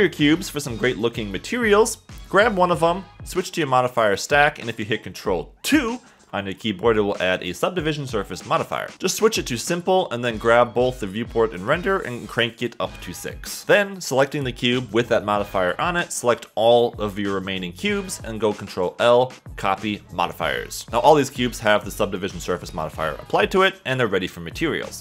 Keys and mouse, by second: 0.0 middle click, 2.3 Tab, 4.3 click, 5.2 ctrl+2, 9.3-10.6 drag, 15.3 shift+click, 19.0 ctrl+l, 19.1 ctrl+l, 21.8 click, 22.5 click, 23.5-25.0 drag.